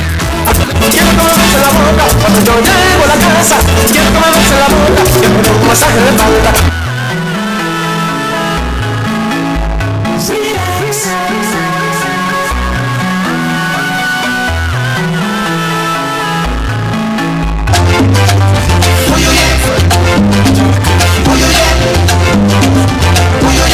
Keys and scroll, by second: 7.4 Page_Down.